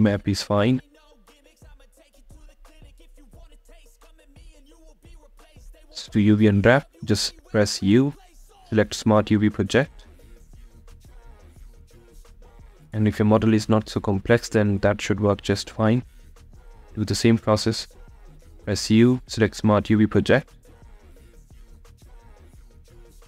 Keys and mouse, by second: 1.4 a, 2.8 a, 13.5 a, 17.1 click.